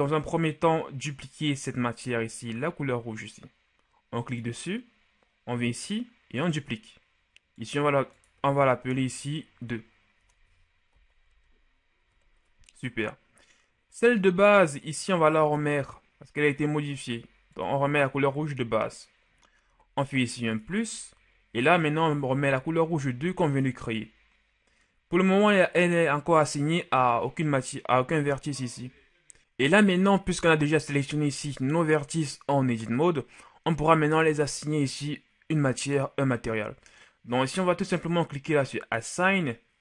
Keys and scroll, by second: 9.0-11.3 typing, 12.0 Return.